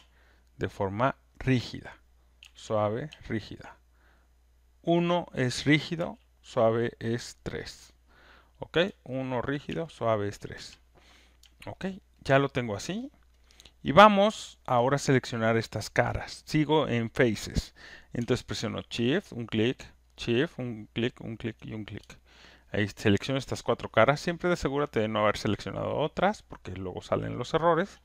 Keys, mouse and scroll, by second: 2.4-3.5 typing, 4.8 3, 5.9 3, 8.8-10.5 typing, 12.1 alt+middle click, 12.1 alt+right click, 12.3 alt+click, 12.9 alt+right click, 13.3 alt+middle click, 13.8 alt+click, 14.4 alt+right click, 14.7 alt+click, 18.9 shift+click, 19.0 alt+middle click, 20.9 click, 21.4 shift+click, 22.4 alt+right click, 26.2 alt+click, 26.2 alt+click, 26.7 alt+right click, 27.0 alt+middle click, 27.3 alt+click, 27.5 alt+right click, 27.9 alt+middle click.